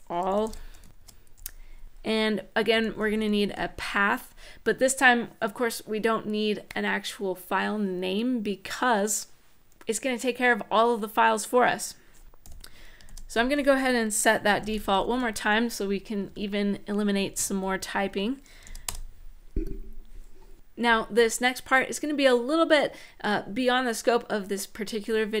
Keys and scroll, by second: 0.0-3.4 typing, 12.2 =, 12.8 shift+', 14.0-15.3 typing, 15.9 Right, 16.1 Up, 16.9 Down, 17.8 Right, 18.4 shift+;, 18.6 Return.